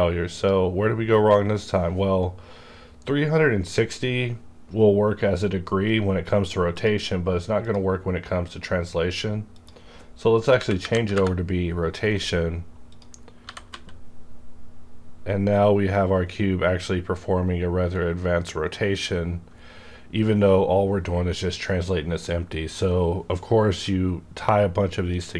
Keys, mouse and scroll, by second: 0.3 click, 0.4 click, 2.0 scroll down 1, 2.5 scroll up 1, 3.2-5.0 scroll down 1, 5.0 scroll down 1, 6.8 click, 6.8-7.2 scroll down 1, 7.6 click, 10.6 KP_3, 10.8 KP_6, 10.9 KP_0, 11.1 KP_Enter, 12.8 click, 13.0 click, 13.4 g, 13.7 z.